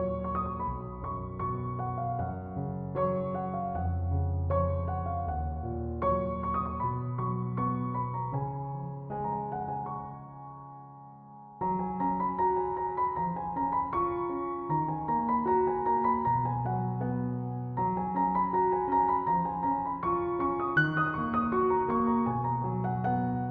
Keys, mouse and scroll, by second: 1.0-4.1 drag, 6.0-7.9 drag, 8.8 alt+scroll up 1, 10.2 click, 10.8 alt+scroll down 1, 11.7 space, 11.8 click, 12.0 space, 13.2-14.4 drag, 14.7 alt+scroll up 1, 15.8 click, 17.5 alt+scroll down 1, 18.6 click.